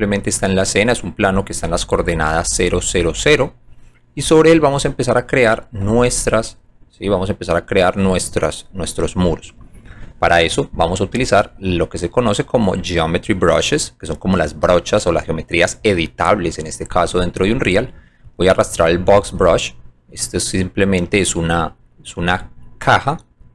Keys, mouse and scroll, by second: 0.8 alt+click, 4.2 click, 4.7 alt+click, 6.6 alt+click, 18.3 click, 22.2 f, 22.7 middle click, 23.2 alt+click.